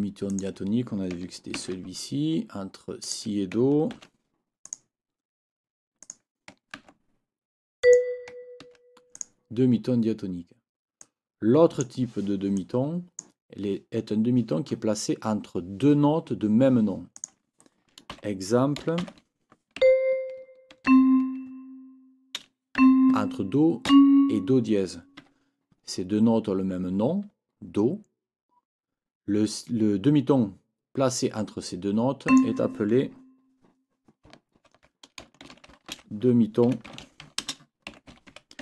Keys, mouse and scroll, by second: 0.3 click, 1.6 ctrl+c, 3.0 click, 4.0 ctrl+v, 4.6 click, 6.0 click, 6.8 ctrl+c, 7.8 click, 8.6 ctrl+v, 9.2 ctrl+click, 11.0-12.0 drag, 12.6 click, 17.2 click, 18.1 n, 19.8 c, 20.8 ctrl+Down, 22.8 c, 23.9 Up, 25.2 Escape, 32.3 click, 34.6 ctrl+t, 35.2-38.6 typing.